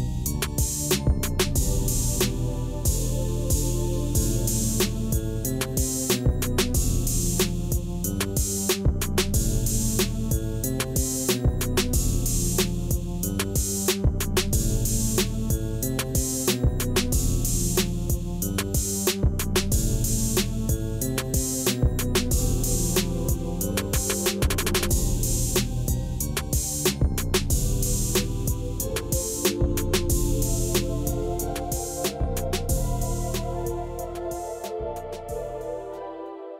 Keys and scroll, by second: 1.2 shift+a, 2.9 Tab, 3.4 s, 9.1 ctrl+b, 11.8 Tab, 12.6 g, 13.0 z, 20.0 shift+z, 20.9 7, 22.4 shift+d, 24.9 r, 26.1 shift+d, 29.7 shift+d, 31.4 r, 32.7 g.